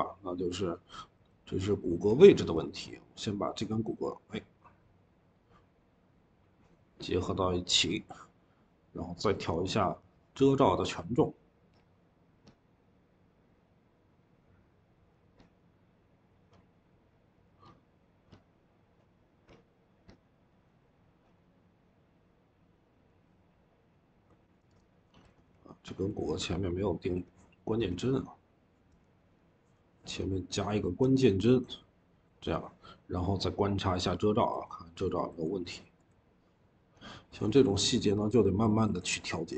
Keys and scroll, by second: 1.9 Escape, 2.4-3.2 typing, 25.1 Escape, 25.3 Escape, 26.9 Escape, 27.6 v, 28.7 Escape, 35.5 q, 37.1-39.5 typing.